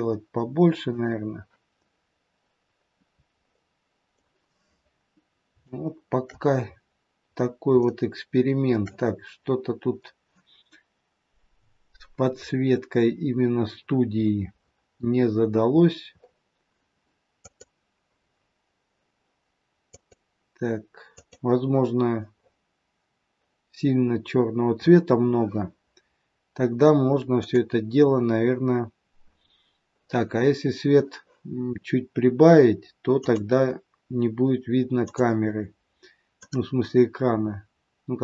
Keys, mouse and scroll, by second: 0.9 click.